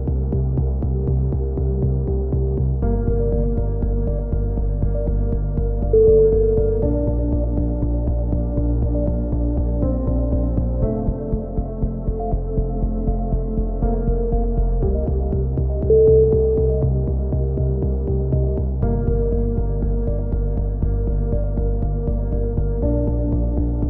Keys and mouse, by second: 0.2 KP_7, 0.8 z, 2.0-4.2 drag, 2.7 c, 4.2 right click, 4.4 click, 5.4 c, 6.4-7.6 drag, 7.9 a, 8.2 z, 8.5 Tab, 8.7-10.4 middle drag, 10.9 Tab, 11.5 z, 12.3 z, 12.5-13.5 drag, 14.4-15.5 drag, 15.5 right click, 15.5 KP_7, 16.2 z, 17.1 middle click, 18.2 click, 20.4 z, 21.2 a, 22.0-23.1 middle drag, 23.1 click, 23.5 z.